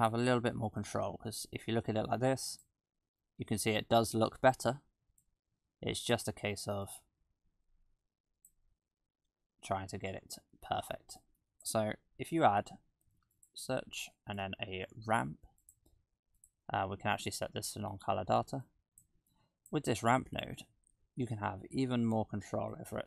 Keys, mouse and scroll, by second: 1.5 click, 5.2 click, 7.0 click, 11.2 click, 12.6 shift+a, 17.2 click, 18.7 click, 19.3 click, 20.6-21.6 scroll up 3, 21.6-22.7 scroll up 2, 22.7 click.